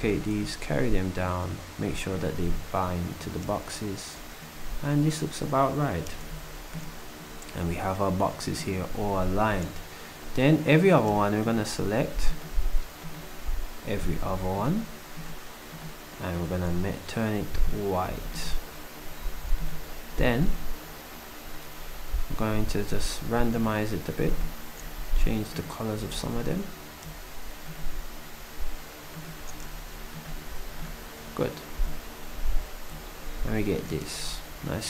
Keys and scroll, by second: 0.1 d, 18.1 s, 26.0 s, 29.7 d.